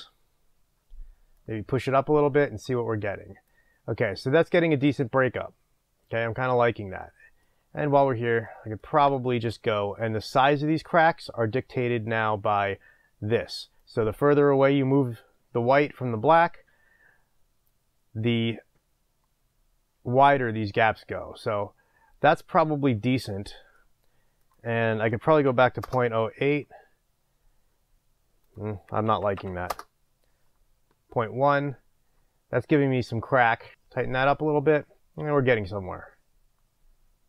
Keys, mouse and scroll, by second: 1.1-1.4 scroll up 1, 25.9 Return, 29.8 Return.